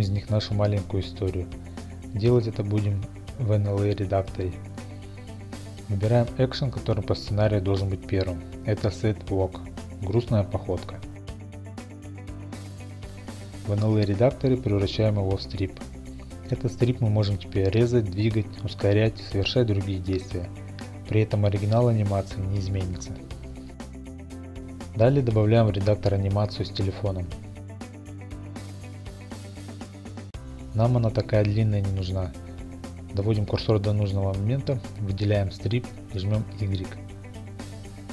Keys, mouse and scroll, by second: 12.1 click, 15.2 click, 19.6 click, 21.0 click, 21.0 x, 22.0 click, 22.3 click, 22.3 g, 23.2 click, 27.6 click, 30.4 click, 31.3 click, 33.9-35.2 drag, 36.1 click, 36.3 middle click, 36.5 middle click.